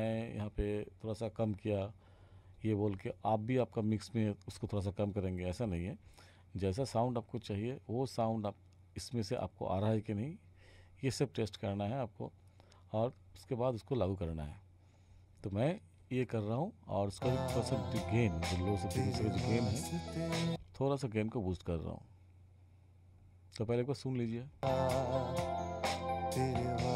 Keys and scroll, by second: 17.2 space, 20.5 space, 24.6 space.